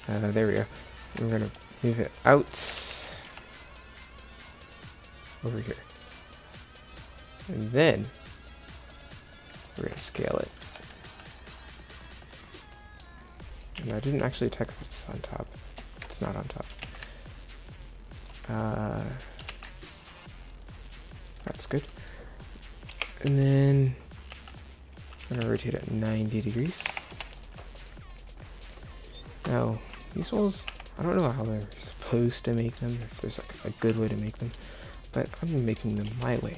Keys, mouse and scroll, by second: 0.0 y, 0.0 g, 0.0 t, 2.8 g, 9.8 s, 12.9 middle click, 13.2 middle click, 13.9 KP_1, 16.8 g, 19.4 g, 23.0 KP_7, 23.3 z, 24.3 z, 25.3 r, 30.7 z, 32.0 z, 32.9 z, 36.1 KP_0.